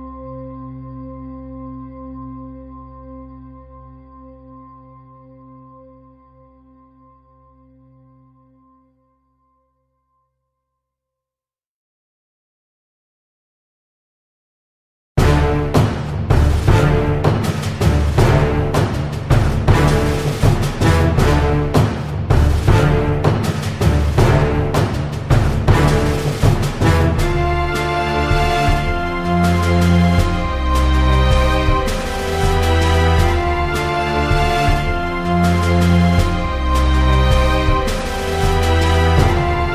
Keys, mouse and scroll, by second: 0.5-1.6 middle drag, 1.2 shift+a, 1.8 s, 2.1 s, 2.7 click, 3.3 s, 3.7 r, 4.5 s, 5.3 click, 6.0 click, 7.0 middle click, 7.2 KP_1, 8.2 click, 8.9 s, 9.6 Tab, 9.8 middle click, 10.5 click, 11.3 a, 11.7 KP_1, 13.4 click, 14.4 Tab, 15.2 click, 16.5 middle click, 16.7 Tab, 16.9 Tab, 17.5 KP_3, 19.1 middle click, 19.8 middle click, 20.0 Tab, 20.6-21.7 middle drag, 21.7 Tab, 21.9 KP_1, 22.7 Tab, 23.0 ctrl+r, 24.0 ctrl+r, 25.6 ctrl+r, 27.3-28.8 drag, 29.0 e, 31.8 click, 31.8 x, 32.1 s, 33.1 middle click, 33.9 ctrl+r, 35.1-36.5 drag, 36.3 ctrl+b, 37.5 a, 37.9-39.1 drag, 38.9 ctrl+b.